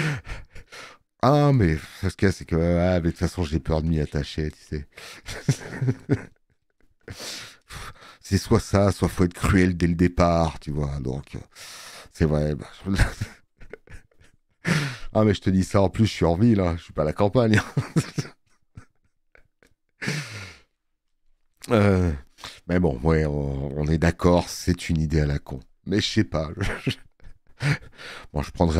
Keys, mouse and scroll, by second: 14.3 click, 23.2 space, 23.3 click, 25.5 alt+middle click, 25.9 space, 26.1 click.